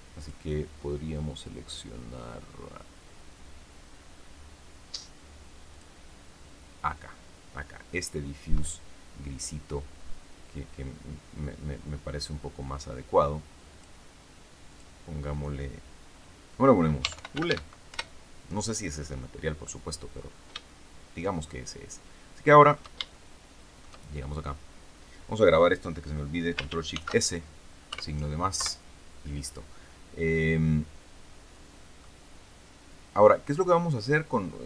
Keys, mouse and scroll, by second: 0.1 click, 5.6 click, 13.6 click, 14.6 click, 16.7-17.9 typing, 20.1-20.4 scroll up 2, 20.5-22.9 shift+middle drag, 23.0 shift+middle click, 26.8 ctrl+shift+s, 27.8 KP_Add, 28.5 KP_Enter, 30.3-31.9 middle drag, 31.9 scroll up 1, 33.5-34.0 scroll down 2.